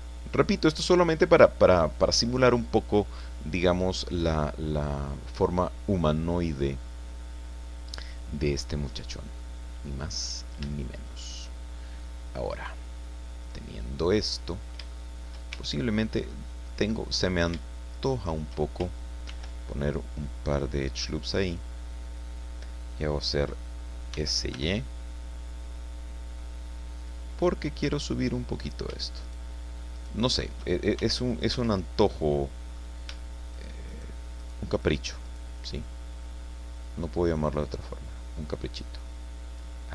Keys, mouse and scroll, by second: 3.0-4.6 drag, 5.0-5.3 scroll down 1, 5.4-8.6 drag, 8.6-9.1 scroll up 1, 9.4-10.6 middle drag, 10.7 shift+middle click, 11.8-13.7 shift+middle drag, 13.7-14.9 drag, 15.0 shift+click, 15.5 shift+Tab, 16.0 shift+scroll up 1, 16.3 click, 16.7 middle click, 17.2 shift+right click, 17.9 shift+right click, 19.3 ctrl+r, 20.2 scroll up 2, 21.5 click, 22.0 click, 24.1 s, 24.5 y, 27.0 click, 27.5 scroll up 2, 28.6 shift+right click, 29.2 shift+right click, 29.9 shift+right click, 31.0 shift+c, 31.3 click, 31.5 Escape, 32.1 click, 33.5 shift+right click, 33.9 shift+right click, 34.4 shift+right click, 34.8 shift+right click, 35.3 shift+right click, 36.8-39.8 drag.